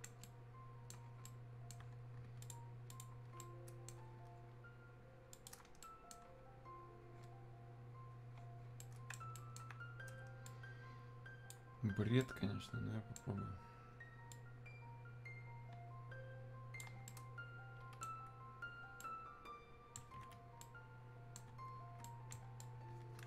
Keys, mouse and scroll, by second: 2.4 ctrl+click, 3.4-5.3 ctrl+right drag, 5.3 click, 5.8 right click, 8.8 right click, 10.4-12.2 drag, 12.2-14.3 right drag, 14.3-17.0 drag, 17.0-22.0 right drag, 22.6-23.2 drag.